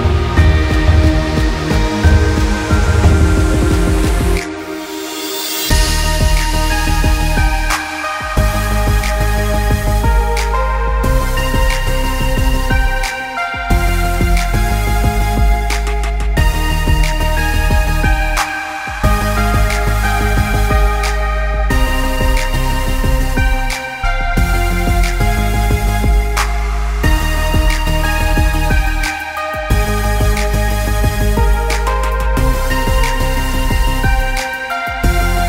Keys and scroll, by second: 29.6 ctrl+0.